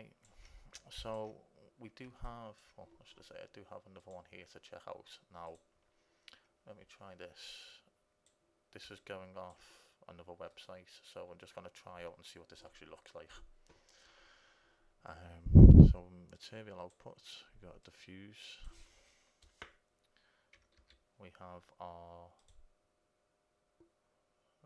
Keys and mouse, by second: 7.8-9.7 drag, 9.7 right click, 10.2 click, 10.7 right click, 11.1-14.4 middle drag, 16.5-20.0 right drag, 20.9 shift+a.